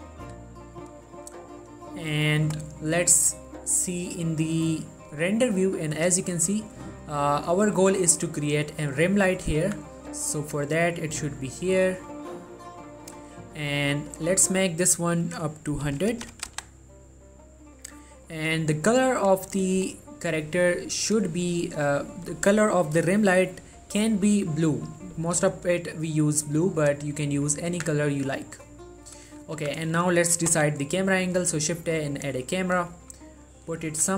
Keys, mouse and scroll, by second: 4.6 click, 5.3 middle click, 5.6 scroll down 1, 5.9 middle click, 6.3-7.0 scroll up 1, 7.0 scroll down 1, 7.3 middle click, 9.8 1, 10.3 g, 11.2 click, 11.5 middle click, 14.3 click, 19.7-21.8 drag, 21.8 middle click, 25.1 middle click, 25.4-26.1 scroll up 1, 26.1 click, 26.6-27.0 scroll down 1, 27.0 click, 27.6 middle click, 27.8 1, 28.4 middle click, 29.8 z, 30.1-30.5 shift+middle drag, 30.7 shift+a, 32.3 click, 32.6 middle click, 33.1 shift+middle click, 33.5 middle click.